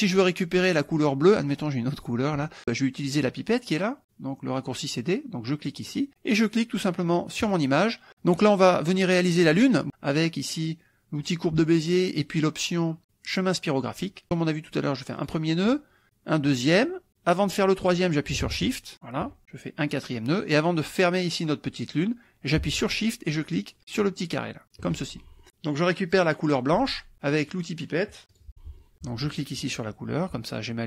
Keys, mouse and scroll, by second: 2.0 click, 5.6 click, 7.4 click, 11.2 click, 15.2 click, 16.5 click, 18.9 shift+click, 19.8 click, 24.6 shift+click, 28.3 click, 29.4 click.